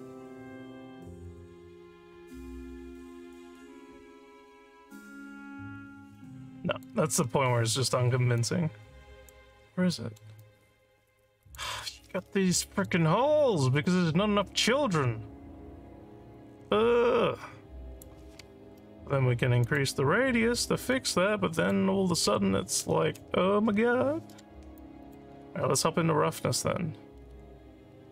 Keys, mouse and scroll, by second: 0.1 click, 1.2 click, 3.9 5, 6.1 alt+click, 7.3 alt+middle click, 7.8 scroll down 2, 8.4 alt+click, 9.5 alt+scroll up 1, 9.9 alt+middle click, 10.4-11.5 alt+drag, 12.6 alt+click, 13.7-18.0 alt+drag, 19.6 click, 20.9 click, 22.3 1, 24.7 alt+click, 27.3 scroll down 4.